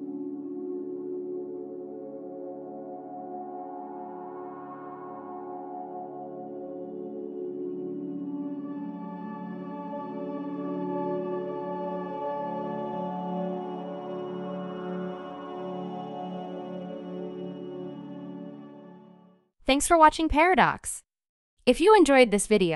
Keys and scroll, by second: 5.0 q, 6.0 q, 10.8 q, 14.4 q, 17.0 typing, 19.6 typing.